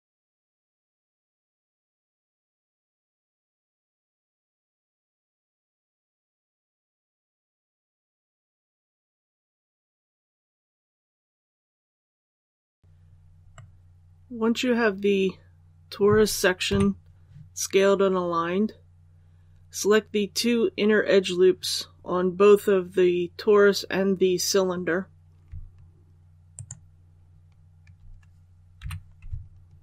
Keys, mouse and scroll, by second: 2.6-5.7 drag, 5.7-8.0 scroll up 1, 8.0-8.4 scroll down 1, 9.4 scroll down 1, 9.7-12.4 drag, 12.8 alt+a, 13.4-16.2 middle drag, 16.6 KP_1, 26.4 alt+right click, 28.7 alt+2.